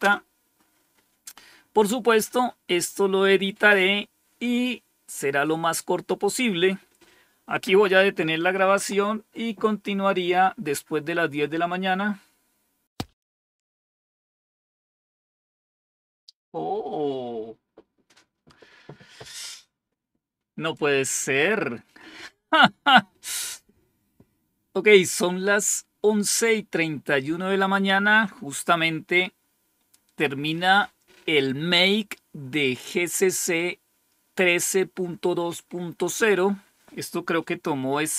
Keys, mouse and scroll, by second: 12.8 click.